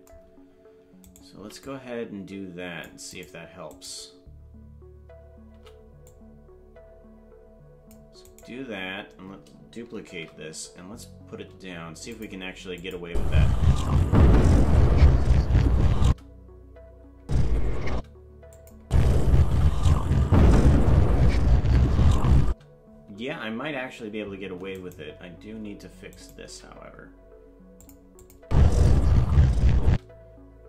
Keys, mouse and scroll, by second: 1.0 right click, 1.3 c, 3.7 right click, 5.5 c, 10.0 shift+d, 12.8 click, 13.0 space, 16.0 space, 18.6 click, 18.8 space, 22.4 space, 24.7 right click, 26.2 right click, 26.4 g, 28.2 click, 28.4 space, 29.9 space.